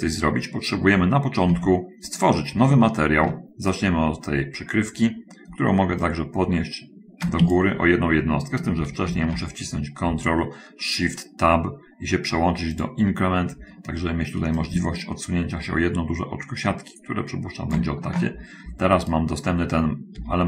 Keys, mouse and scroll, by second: 1.3 click, 2.0 Tab, 2.8-3.8 shift+middle drag, 4.1 shift+right click, 6.5-8.2 ctrl+drag, 7.8 ctrl+Escape, 9.6 ctrl+shift+Tab, 13.2 click, 14.8-18.2 ctrl+shift+drag.